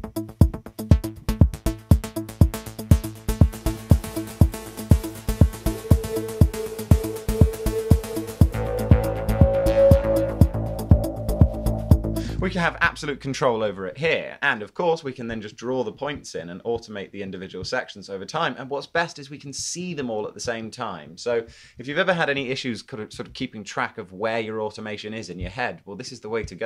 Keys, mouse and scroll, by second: 21.5 super+z, 22.3 super+z.